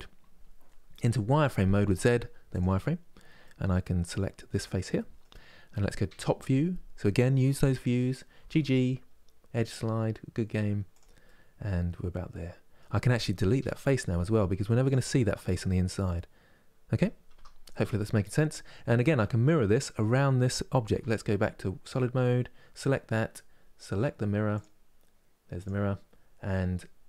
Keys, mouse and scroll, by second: 1.0 z, 3.1-4.2 middle drag, 4.2 click, 4.7-5.8 middle drag, 5.8 KP_7, 8.1 g, 10.9-12.5 middle drag, 12.5-13.0 scroll up 1, 13.3 Delete, 14.8-17.0 middle drag, 17.0 Tab, 17.4 middle click, 18.3 scroll down 1, 18.7-20.7 middle drag, 20.7 z, 24.2-27.0 drag.